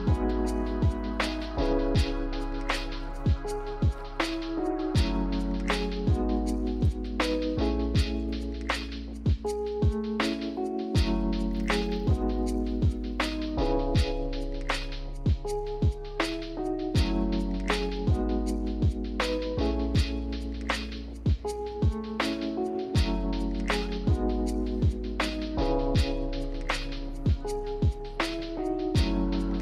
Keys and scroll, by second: 1.0 d, 3.7 a, 11.6 ctrl+z, 11.8 ctrl+z, 12.0 ctrl+z, 13.9 x, 16.3 z, 18.4 d, 20.2 z, 24.4 v, 26.7 Delete, 29.2 a.